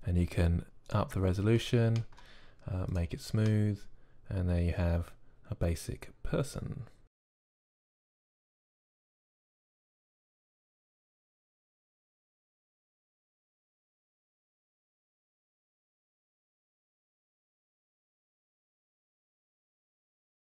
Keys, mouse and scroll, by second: 0.7-2.7 middle drag, 2.7-4.6 drag, 4.6 middle click, 4.9 click, 7.3 click, 8.5 Tab, 8.9 click, 9.7 ctrl+Tab, 9.9 a, 10.6 a, 10.9 c, 12.0-13.1 drag, 13.7-16.5 drag, 16.8 click, 17.1 click, 17.7 click, 18.2 a, 18.6 c, 19.3 click, 19.7 c.